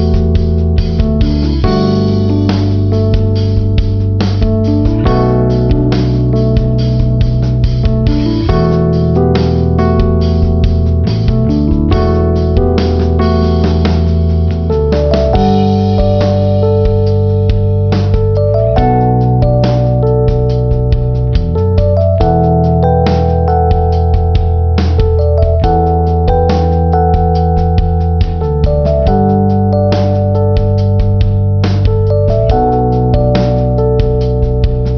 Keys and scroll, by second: 1.4 ctrl+-, 3.6 ctrl+=, 6.8 ctrl+-, 7.5 ctrl+=, 10.4 ctrl+-, 14.3 ctrl+=, 15.8 ctrl+=.